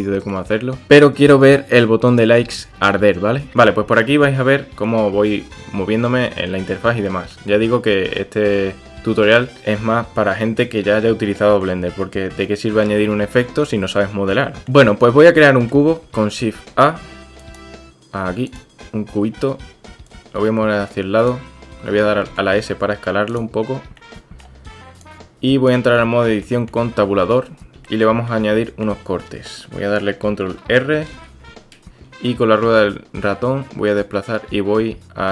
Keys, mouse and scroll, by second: 0.7 drag, 3.5 click, 4.2-4.7 drag, 4.7 middle click, 4.9 drag, 5.0-5.6 middle drag, 5.6-5.9 drag, 5.9 middle click, 6.0 drag, 6.3 shift+middle drag, 6.6-6.9 middle drag, 7.1-7.4 shift+middle drag, 7.5-8.0 middle drag, 8.2 shift+drag, 8.2 shift+middle click, 9.6-11.6 middle drag, 12.3-12.9 drag, 14.6 click, 15.3-15.7 shift+drag, 16.7 shift+a, 20.2-21.3 drag, 22.3 s, 24.0-24.4 middle drag, 25.1 click, 26.0-26.3 shift+middle drag, 26.4 middle click, 27.2 Tab, 27.9-28.2 shift+drag, 28.3 click.